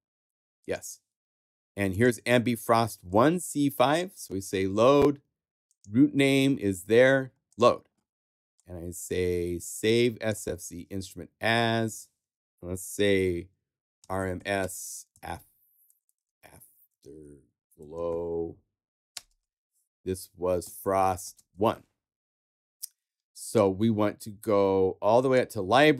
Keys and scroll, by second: 13.7-19.3 typing, 20.4-22.0 typing.